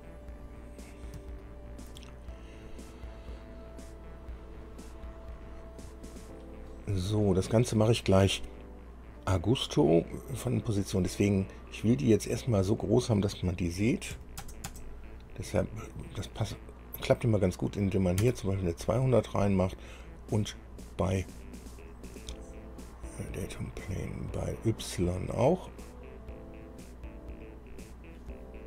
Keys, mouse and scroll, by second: 0.6-0.9 scroll down 2, 1.6 shift+middle click, 4.9 click, 10.7 click, 14.3 KP_2, 14.6 KP_0, 14.9 KP_0, 18.4 KP_Enter, 22.7 scroll down 2, 23.6 click, 25.7-27.0 drag, 28.1 click.